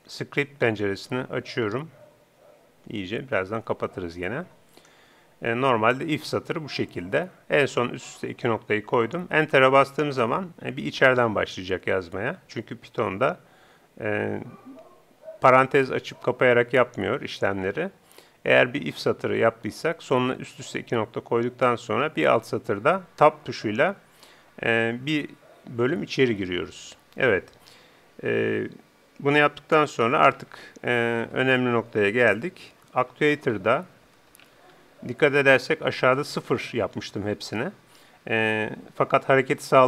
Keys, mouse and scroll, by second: 0.7-2.1 drag.